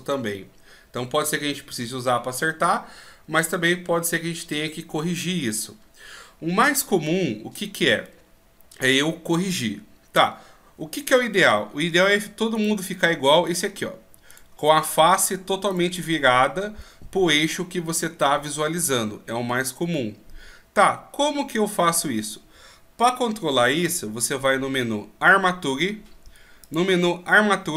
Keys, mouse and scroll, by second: 12.5 right click, 13.5 right click, 23.8 n.